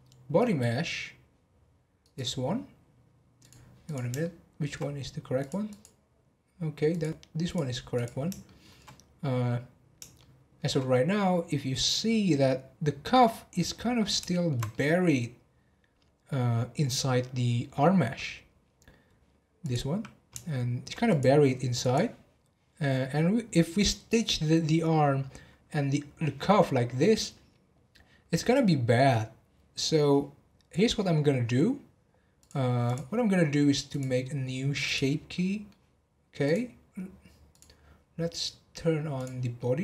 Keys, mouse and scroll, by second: 0.4 click, 2.0 click, 3.4 click, 3.8 click, 4.2-5.4 shift+middle drag, 5.4 click, 5.7 click, 6.9 click, 7.4 click, 7.9 click, 8.4-9.0 shift+middle drag, 9.0-10.2 scroll up 2, 10.2-14.0 shift+middle drag, 14.0-14.3 scroll up 3, 14.3-17.8 shift+middle drag, 19.6 click, 21.0 click, 21.8 click, 32.4 click, 32.8 click, 33.9 click, 34.2-34.8 scroll down 2, 34.8 click, 35.3-36.4 middle drag, 36.4 click, 37.5 drag, 38.3-39.2 scroll up 1, 39.2 click, 39.6-39.8 middle drag.